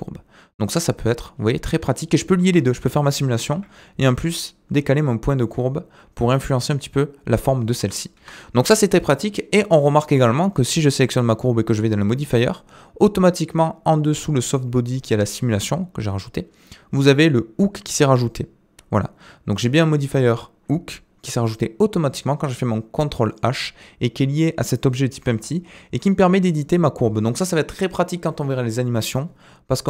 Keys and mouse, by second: 2.4 space, 3.5 g, 8.2 Escape, 10.0 click, 11.8 click, 19.6-21.1 drag, 25.2 g.